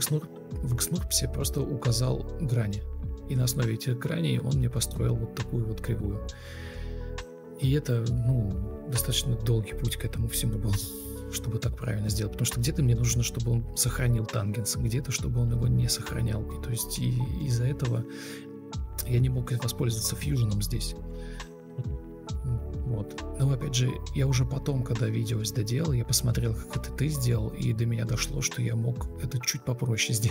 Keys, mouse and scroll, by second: 13.9 BackSpace, 14.0 BackSpace, 14.2 BackSpace.